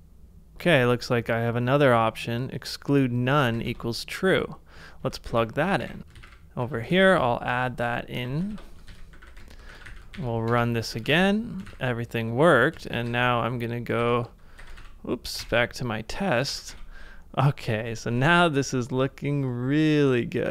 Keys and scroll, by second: 3.5 super+c, 5.3 ctrl+a, 5.8-7.1 typing, 7.2 ctrl+c, 8.2-9.8 typing, 8.5 super+v, 9.8 ctrl+a, 10.5 ctrl+a, 11.0 ctrl+a, 11.6 space, 12.7 space, 14.1 ctrl+c, 14.6 ctrl+w, 15.4 Return, 16.5 ctrl+a, 18.2 super+Tab, 18.9 ctrl+z.